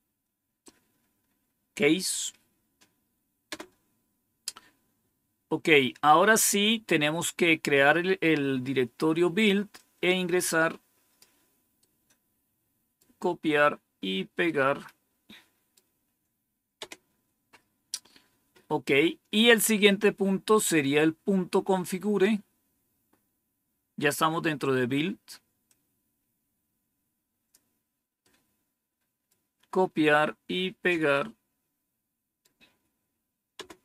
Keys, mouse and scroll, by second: 3.4 Return, 6.1 scroll down 2, 9.7-11.1 drag, 11.7-12.9 right drag, 14.4-15.7 right drag, 16.7 Return, 20.1 scroll down 2, 23.0-25.6 scroll up 2, 25.6-27.5 drag, 28.1-29.2 right drag, 31.1-32.4 right drag.